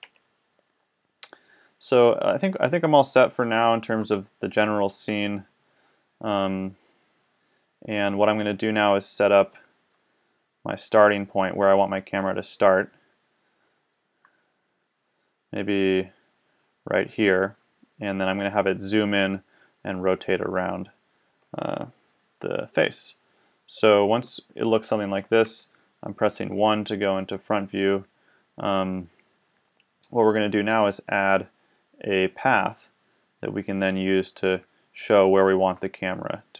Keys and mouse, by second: 0.0 Escape, 3.9 KP_0, 9.9-12.1 middle drag, 25.5 KP_1.